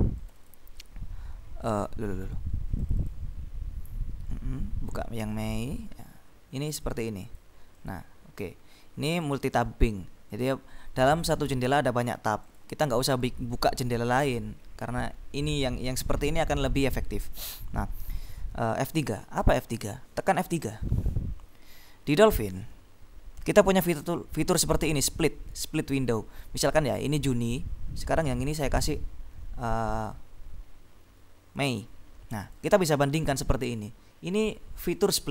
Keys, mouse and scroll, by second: 0.3 click, 1.3-1.8 scroll down 2, 1.8-2.4 scroll up 2, 2.9 click, 4.1-4.6 scroll down 2, 5.4 click, 6.7 click, 9.6 click, 10.4 click, 11.3 click, 12.6 click, 13.4-13.9 scroll up 2, 19.5-20.2 scroll up 2, 20.6 F3, 27.0 click, 28.2 click, 30.0 click, 31.8 click, 32.6 click, 35.1-35.3 drag.